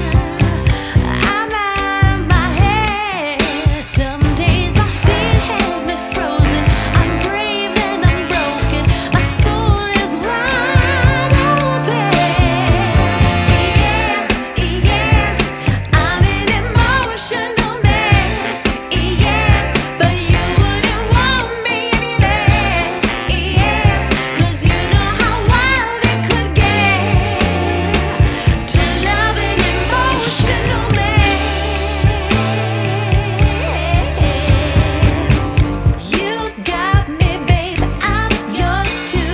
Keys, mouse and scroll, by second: 0.9 click, 1.7 click, 3.8 click, 4.6 click, 8.8-9.3 scroll up 1, 11.0 click, 14.4 click, 19.8 click, 23.0 click, 27.1 click, 31.5 click, 33.8 click, 35.3 click, 35.3 F10, 37.3 click, 38.4 click.